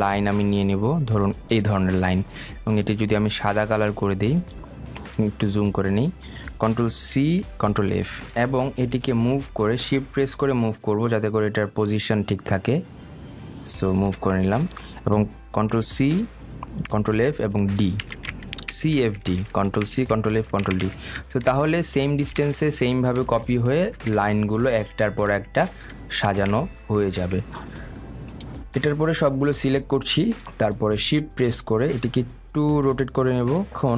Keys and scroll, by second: 7.5 ctrl+c, 8.1 ctrl+f, 16.0 ctrl+c, 17.4 ctrl+f, 18.4 ctrl+c, 18.7 ctrl+f, 19.0 ctrl+d, 19.3 ctrl+c, 19.6 ctrl+f, 19.8 ctrl+d, 20.1 ctrl+c, 20.4 ctrl+f, 20.7 ctrl+d, 21.2 ctrl+f, 21.4 ctrl+d, 21.8 ctrl+c, 22.1 ctrl+f, 22.4 ctrl+d, 22.7 ctrl+c, 23.0 ctrl+f, 23.2 ctrl+d, 23.5 ctrl+c, 23.8 ctrl+f, 24.1 ctrl+d, 24.4 ctrl+c, 24.8 ctrl+f, 25.1 ctrl+d, 25.4 ctrl+c, 25.7 ctrl+f, 26.0 ctrl+d, 26.7 ctrl+c, 27.0 ctrl+f, 27.2 ctrl+d.